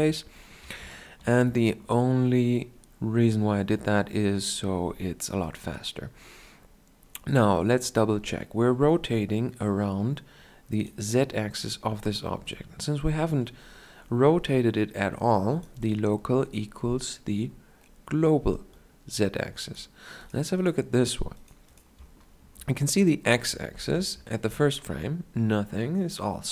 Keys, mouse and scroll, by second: 7.6-9.5 drag, 12.3-14.9 drag, 18.5-23.4 drag, 23.6 shift+Left, 23.6 shift+Down.